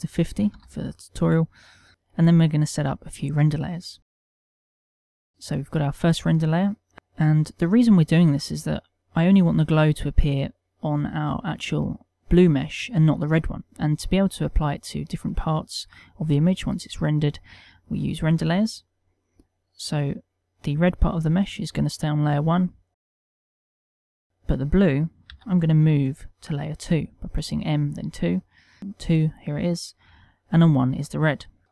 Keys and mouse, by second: 1.3 click, 3.9 middle click, 9.5 click, 10.0 click, 10.7 click, 11.2 middle click, 12.0 click, 12.8 middle click, 21.1 click, 23.7 click, 24.0 click, 24.6 click, 25.9 m, 29.3 2, 30.7 1, 31.6 shift+2.